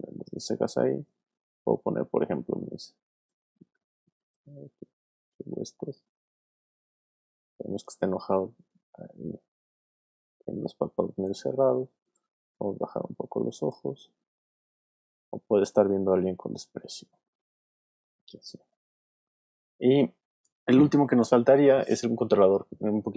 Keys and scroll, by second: 2.0 v, 22.0 space.